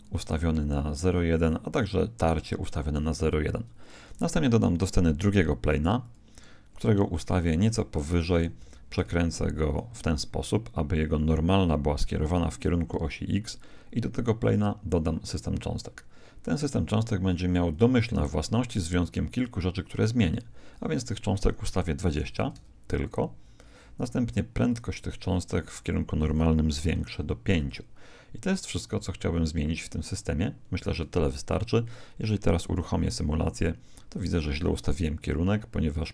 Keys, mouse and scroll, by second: 4.1 shift+a, 6.7 g, 8.5 r, 15.3 click, 17.7 click, 20.7 click, 24.7-27.5 drag, 32.6 alt+a.